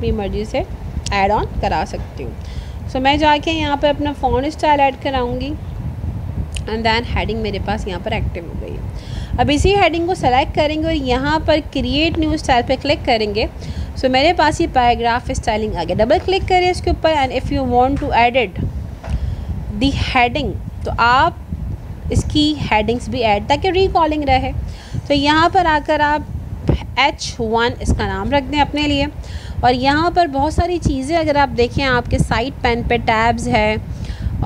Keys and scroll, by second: 0.9 ctrl+a, 25.6 ctrl+a.